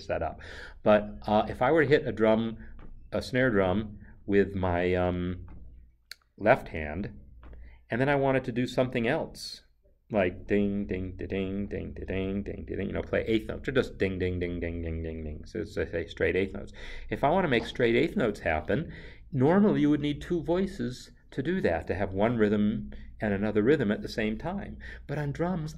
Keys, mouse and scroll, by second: 17.4 click.